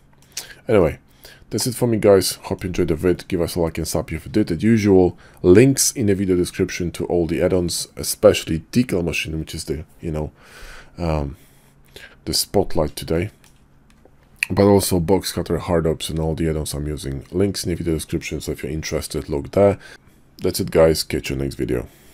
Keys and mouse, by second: 0.8-2.5 middle drag, 13.1-13.4 shift+middle drag.